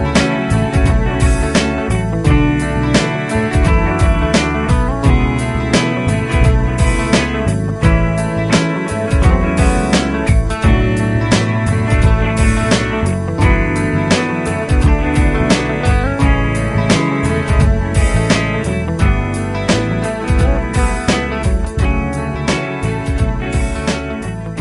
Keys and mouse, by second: 2.9 Delete, 6.1 ctrl+z, 8.1 double click, 24.1 double click.